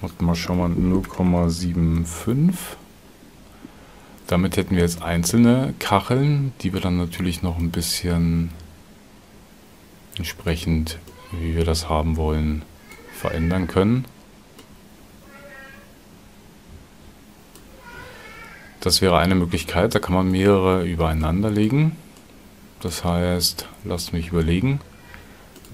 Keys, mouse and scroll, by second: 25.5 shift+click.